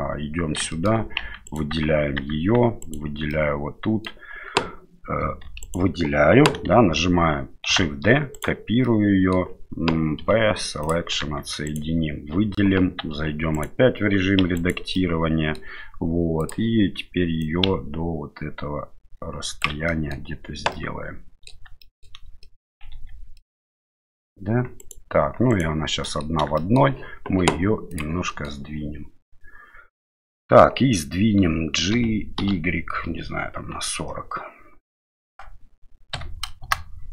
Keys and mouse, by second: 0.7 shift+middle click, 1.2 Tab, 1.5 right click, 2.2 Tab, 2.8 right click, 3.3 middle click, 5.4 3, 5.6 right click, 7.7 shift+d, 8.8 middle click, 10.2 p, 11.2 Tab, 11.6 right click, 13.0 Tab, 13.5 right click, 14.4 2, 14.5 right click, 14.9 middle click, 16.4 click, 17.4-19.6 drag, 19.8 middle click, 20.7 middle click, 21.8 shift+middle click, 22.4 middle click, 22.9 Tab, 23.3-24.2 middle drag, 24.8 right click, 25.5 right click, 26.0 middle click, 26.5 shift+middle drag, 27.9 click, 28.2 middle click, 31.9 g.